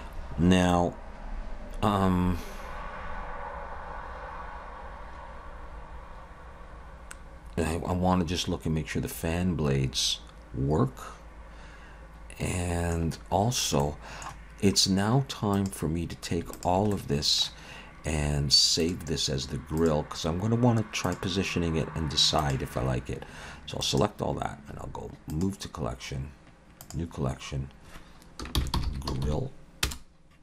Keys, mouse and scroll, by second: 0.7 middle click, 13.6 scroll down 1, 13.8 middle click, 15.5 click, 16.5 shift+click, 16.9 middle click, 18.8 shift+click, 20.0 shift+click, 22.8 shift+click, 23.8 right click, 29.2 l.